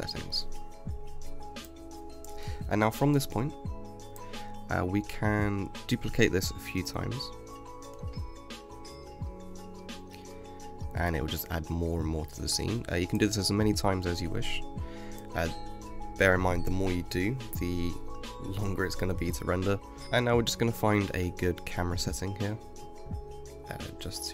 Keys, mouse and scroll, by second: 2.1 alt+d, 7.3 g, 9.7-13.6 middle drag, 13.6 space, 17.0 space, 18.4 space, 19.2 middle click, 20.0 KP_0, 21.3-22.2 scroll down 6, 22.2-24.3 middle drag.